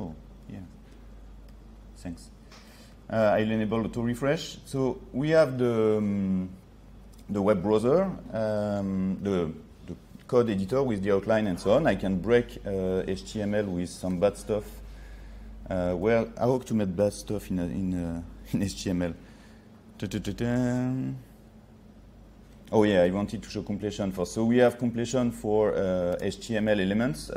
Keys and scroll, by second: 16.0 ctrl+z, 26.2 ctrl+space.